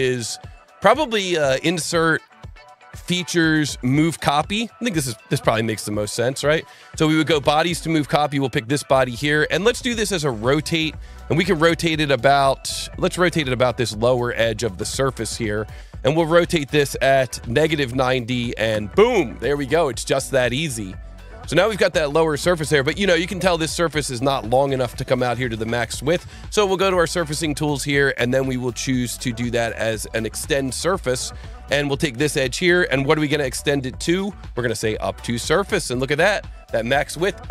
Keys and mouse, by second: 1.2 click, 3.3 click, 5.4 click, 6.8 click, 8.1 click, 10.0 click, 14.2 click, 16.4 click, 17.1 KP_Subtract, 17.3 KP_9, 17.4 KP_0, 17.6 KP_Enter, 18.7 KP_Enter, 20.0 click, 30.3 click, 32.3 click, 35.1 click, 36.3 click.